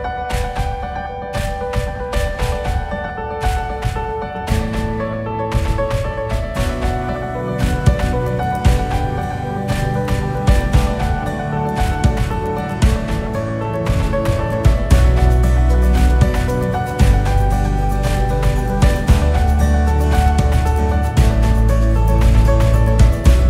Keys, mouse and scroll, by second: 1.0-2.0 typing, 3.5 g, 5.4-6.3 scroll up 4, 6.3 scroll up 2, 6.5-6.9 scroll down 2, 6.9 click, 8.0 scroll up 1, 8.5-9.2 drag, 9.4 scroll down 4, 10.1-10.8 drag, 10.9-11.3 scroll up 4, 11.3-12.3 scroll down 8, 12.3-12.7 scroll up 2, 12.7 scroll down 2, 13.0 scroll up 6, 13.8-14.5 scroll down 1, 14.5-15.0 KP_6, 15.9 KP_4, 16.0 KP_4, 16.5 scroll up 4, 17.4 scroll down 1, 17.8-18.4 scroll up 1, 18.4-19.8 scroll down 1, 19.8 scroll down 3, 22.6 scroll up 1.